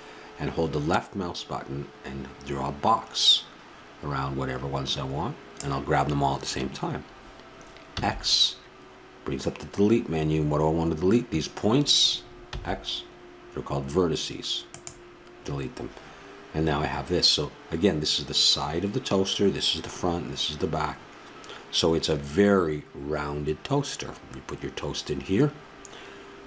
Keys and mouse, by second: 8.0 x, 12.5 x.